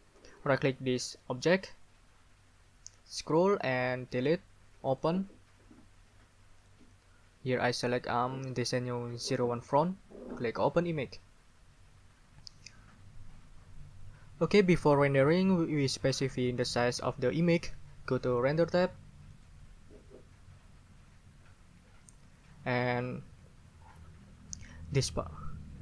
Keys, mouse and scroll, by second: 1.3 middle click, 3.1 scroll down 2, 4.1 middle click, 4.9 middle click, 6.6 middle click, 9.6 middle click, 10.6 middle click, 19.3 middle click, 25.7 scroll down 1.